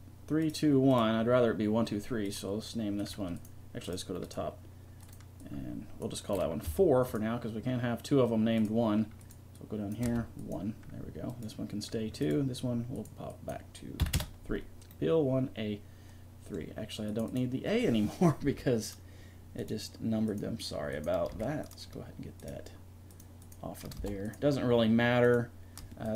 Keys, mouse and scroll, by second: 14.2 right click, 14.9-17.1 middle drag, 18.7 right click, 19.6 right click, 21.6 right click, 22.4 right click, 24.3 right click, 25.3 right click.